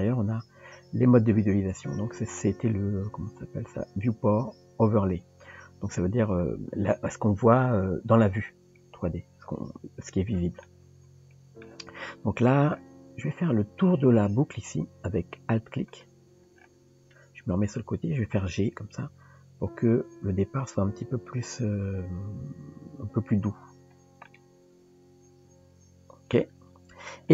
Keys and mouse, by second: 10.7 middle click, 14.1 click, 15.9 alt+click, 17.5 KP_3, 19.1 g, 24.3-26.3 middle drag.